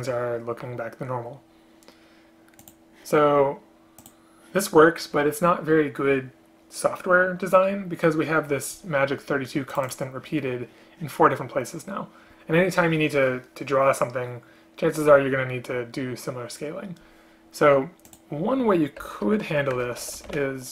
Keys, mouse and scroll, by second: 19.1 Return, 19.9 Return.